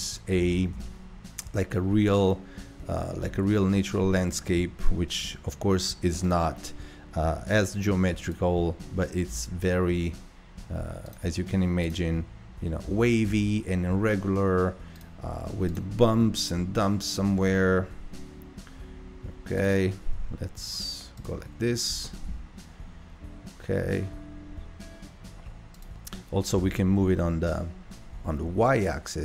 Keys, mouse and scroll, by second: 0.3 g, 7.2-7.6 scroll down 2, 7.6 middle click, 8.2 click, 8.8 g, 11.8 click, 12.9 g, 15.7 click, 16.2 g, 21.2 click, 21.9 g, 26.5 g.